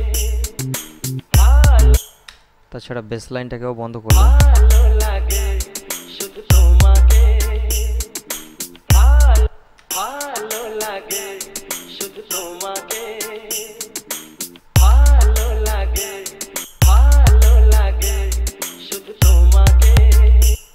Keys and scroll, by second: 2.2 space, 4.2 space, 9.8 space, 14.8 space, 16.8 space.